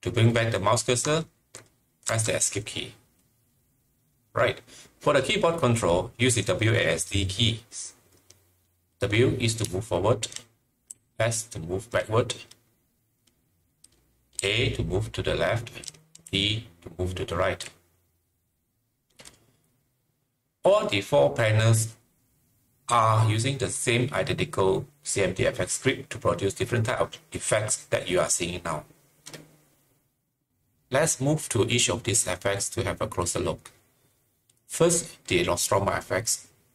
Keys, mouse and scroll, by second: 2.0 Delete, 2.0 click, 2.0 Escape, 2.0 click, 9.6 click, 9.6 Escape, 9.6-11.8 typing, 11.3 click, 14.6-17.3 typing.